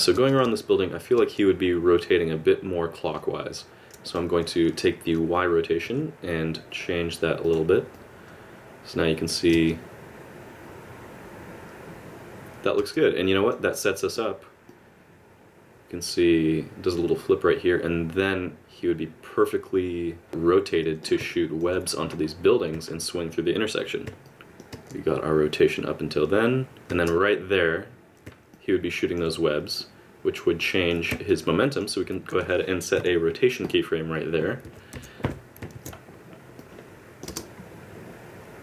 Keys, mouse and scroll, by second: 0.3 click, 0.3 space, 0.4 space, 1.2 space, 4.0 click, 5.7 g, 7.9 click, 9.5 space, 12.8 space, 13.2 click, 13.9 middle click, 14.7 click, 21.3 middle click, 24.3 middle click, 24.4 click, 24.7 space, 26.9 space, 28.5 middle click, 29.8 click, 31.3 middle click, 32.9 i, 34.9 a, 35.2 KP_Decimal, 35.7 alt+a, 36.6 click, 37.3 space.